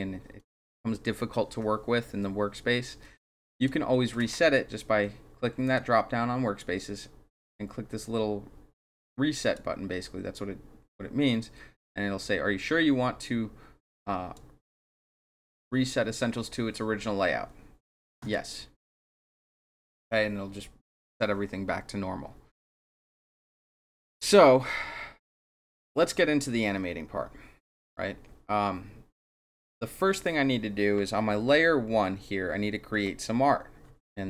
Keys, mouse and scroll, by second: 3.5 click, 5.6 click, 9.4 click, 14.0 click, 18.2 click.